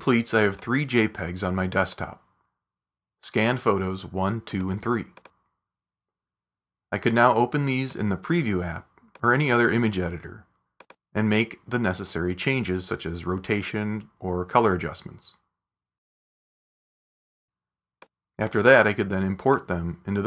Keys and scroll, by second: 13.4 super+s, 14.1 super+w.